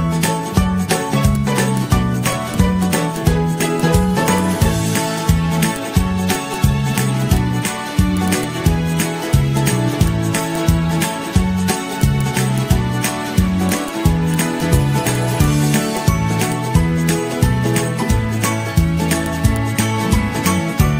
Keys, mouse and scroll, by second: 0.5 ctrl+z, 0.7 g, 3.4 i, 5.0 d, 5.5 i, 7.0 g, 17.0 Down, 17.1 Down, 17.3 Down, 17.3-17.9 scroll down 18, 17.9 ctrl+z, 18.2 ctrl+z, 18.4 ctrl+z, 18.6 ctrl+z, 19.1 z, 19.9 ctrl+z, 20.2 ctrl+z, 20.8 ctrl+shift+z, 20.9 ctrl+shift+z.